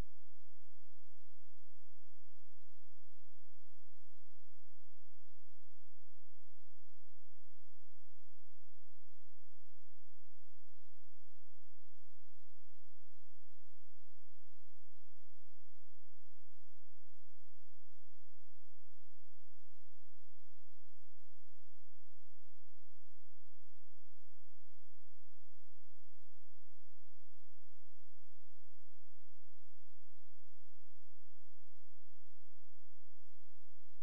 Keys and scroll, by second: 10.9 space, 16.9 alt+z.